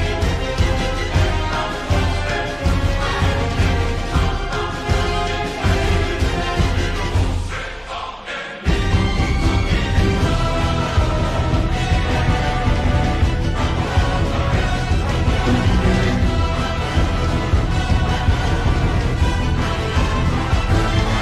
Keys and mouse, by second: 3.4 KP_7, 4.5 z, 10.7 z, 11.6 Tab, 12.2 click, 12.9 middle click, 14.4 KP_7, 16.1 shift+a, 19.9 s.